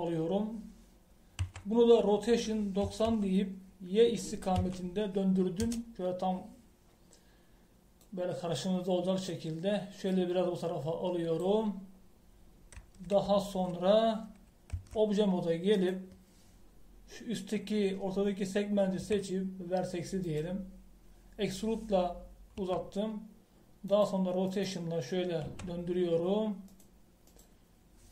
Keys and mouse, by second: 2.4 r, 9.0 click, 12.2 click, 15.7 Tab, 20.0 e, 23.7 r, 25.4-27.3 right drag, 26.4 r.